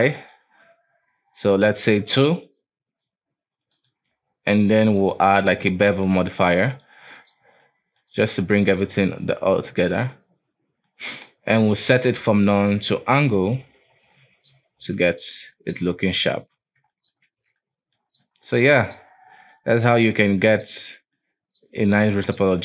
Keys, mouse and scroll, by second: 3.8 click, 4.6 click, 5.1-7.5 drag, 7.5 scroll down 1, 7.8-9.8 middle drag, 9.8-11.0 drag, 11.0-12.7 middle drag, 12.7 click, 13.5 middle drag, 13.8-14.3 scroll up 3, 14.3-15.0 middle drag, 15.0 right click, 15.3-15.8 middle drag, 15.8-16.7 scroll down 2, 16.7 alt+w, 17.0-17.5 middle drag, 17.5 alt+a, 17.7-18.2 middle drag, 18.2-18.6 scroll up 1, 18.6-19.3 middle drag, 19.3-19.6 scroll down 2, 19.6-20.9 middle drag, 20.9-21.3 scroll up 1, 21.3-22.6 middle drag.